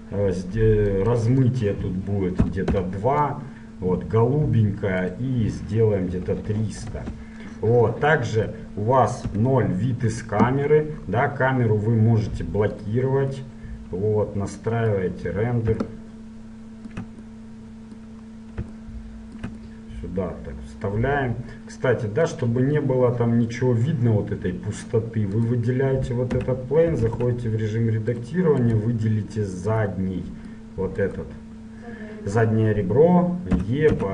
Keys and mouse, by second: 0.0-3.6 drag, 5.2-7.0 drag, 8.4-9.4 middle drag, 9.4 KP_0, 13.0-14.9 middle drag, 16.2-22.4 middle drag, 22.4-24.3 drag, 25.6-27.4 right drag, 26.5 Tab, 27.4 ctrl+Tab, 28.8-30.0 drag, 30.0 right click, 31.3-32.8 middle drag, 32.8 right click, 33.0 middle click, 33.8 e.